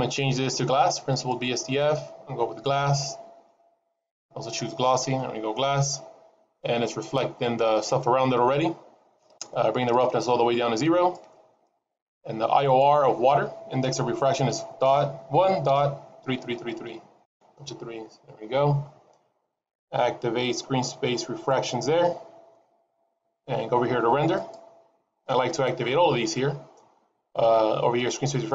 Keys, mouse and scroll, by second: 1.0 click, 5.0 middle click, 6.3-8.1 scroll up 1, 8.1-9.2 scroll up 1, 9.8 click, 12.6 click, 16.2 KP_3, 16.4 KP_3, 16.8 KP_3, 19.3-20.6 scroll down 2, 20.6-21.4 scroll down 2, 21.4 click, 24.3 click.